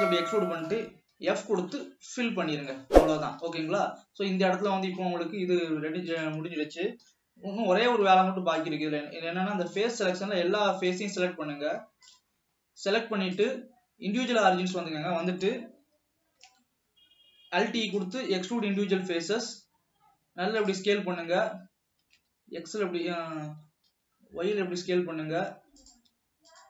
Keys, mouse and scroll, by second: 0.0 scroll down 1, 0.2 middle click, 1.2 f, 2.0-3.4 middle drag, 3.4 ctrl+s, 4.1-4.5 scroll down 1, 4.5-6.3 shift+middle drag, 6.3 click, 7.2 KP_7, 8.0 alt+a, 8.7 click, 13.5-15.0 drag, 15.0-15.8 middle drag, 15.8-16.4 scroll up 2, 16.5 alt+e, 19.3 s, 22.1 s.